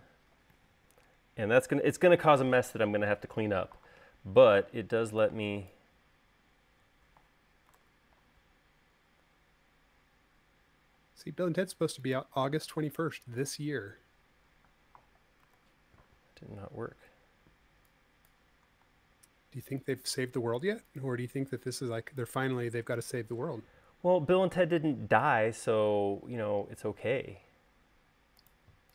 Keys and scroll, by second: 4.7 e, 8.0 super+z, 11.3 l, 15.8 super+z, 17.7 e, 19.2 l, 21.7 l, 23.7 space.